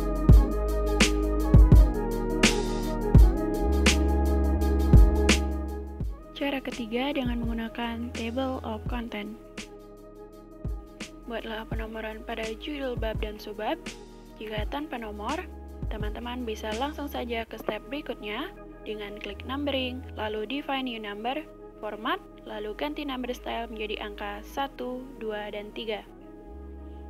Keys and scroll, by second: 0.8-1.5 typing, 10.7-11.7 typing, 12.8 i, 17.5 i, 22.1 typing.